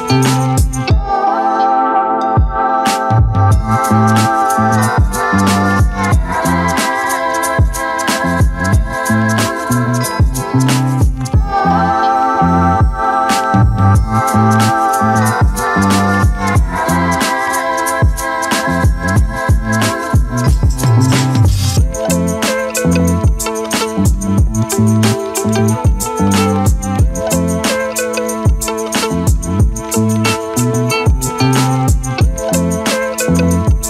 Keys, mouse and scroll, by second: 0.4 click, 1.0-1.3 scroll down 1, 1.6 z, 2.7-4.5 alt+drag, 4.7-6.0 alt+drag, 6.6 click, 7.1-8.6 alt+right drag, 8.6-9.7 alt+drag, 10.6 click, 11.2-16.0 drag, 16.8 click, 17.4 click, 18.4 click, 18.9 Tab, 19.4-21.1 alt+drag, 23.6 `, 24.6-25.6 alt+drag, 26.8 `, 27.4-27.9 scroll up 1, 27.9 z, 30.6 click, 32.6 click, 33.2 scroll up 1.